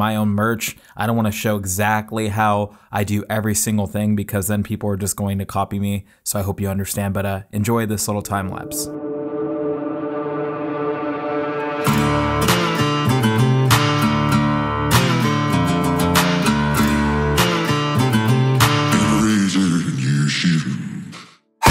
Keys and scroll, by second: 1.4 Return, 2.1 space, 2.7 space, 3.6 z, 4.7 space, 5.1 z, 5.2 space, 21.6 Left, 21.6 BackSpace.